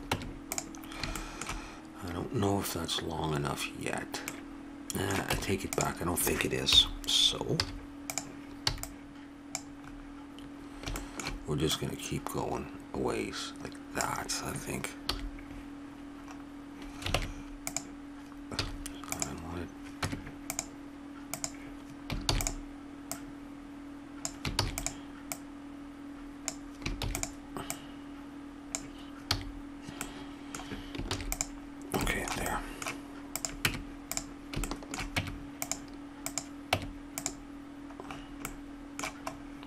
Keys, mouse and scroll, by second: 0.1 Tab, 3.3-4.5 middle drag, 5.3 Tab, 6.7 KP_7, 7.6 z, 8.7 b, 11.7-13.4 drag, 15.1 a, 17.1 ctrl+Tab, 18.6 z, 20.0 Tab, 21.3 click, 22.3 shift+d, 24.5 shift+d, 25.7-27.1 drag, 27.1 shift+d, 27.7-29.6 drag, 29.3 a, 31.0 ctrl+s, 33.3 click, 33.6 Tab, 34.6-38.0 drag, 35.1 Tab, 36.7 Tab, 38.1-39.6 middle drag.